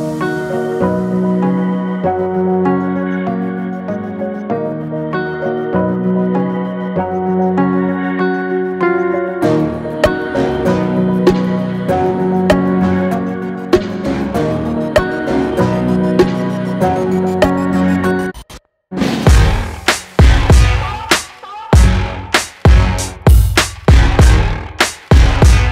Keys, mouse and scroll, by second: 2.2 click, 4.9-19.4 drag, 22.3-25.7 drag.